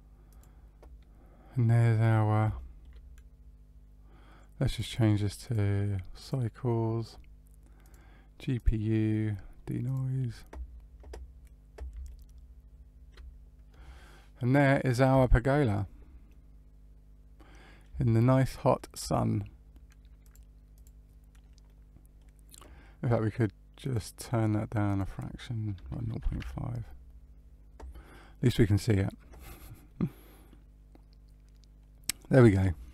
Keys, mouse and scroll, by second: 0.2 click, 1.7-2.5 scroll up 2, 2.5 middle click, 4.6 click, 5.4 click, 7.8 click, 9.8 click, 12.1 middle click, 12.1-12.6 scroll up 1, 16.2 middle click, 18.0 shift+middle click, 20.2 click, 20.7 click, 21.6 middle click, 23.8 click, 24.8 click, 29.8 middle click.